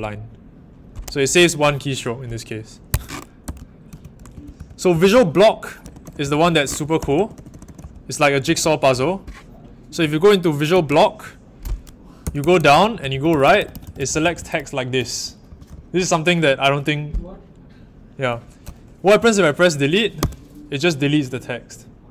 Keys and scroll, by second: 2.8 Escape, 3.2-8.9 typing, 10.7 ctrl+v, 12.2-15.7 typing, 20.1 d.